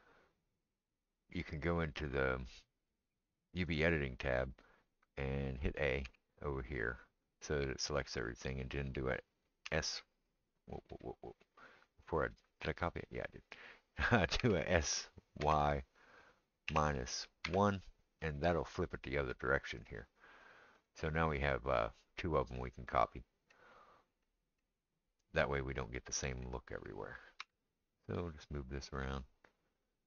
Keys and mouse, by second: 3.7 click, 3.8-30.0 middle drag, 6.1 a, 9.7 s, 14.4 s, 27.5 g.